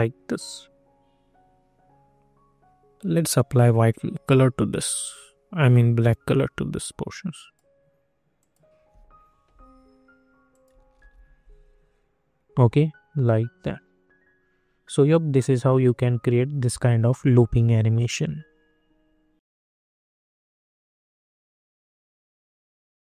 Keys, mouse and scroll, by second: 3.2-8.3 drag, 10.9 ctrl+r.